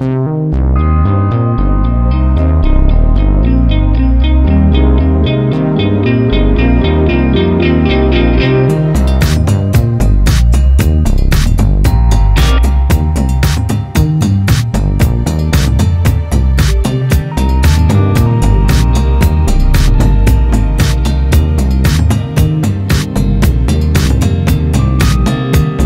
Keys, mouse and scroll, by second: 6.5 click, 12.5-12.9 scroll down 1, 20.0-22.3 drag, 23.8-25.8 drag.